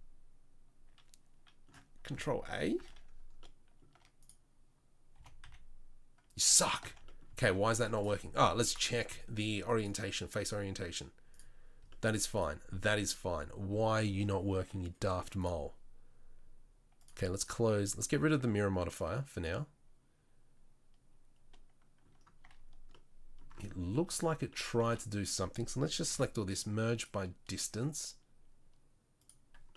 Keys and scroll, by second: 2.7 ctrl+a, 5.1 g, 7.4 ctrl+z, 22.4 Tab, 23.7 Tab, 24.1 Tab, 24.8 a, 26.1 m.